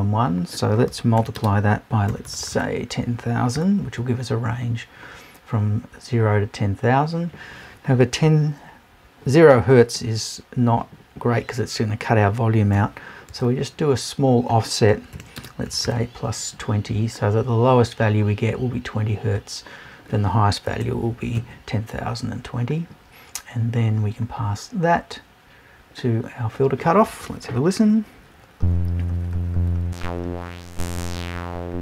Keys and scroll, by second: 20.7 Right.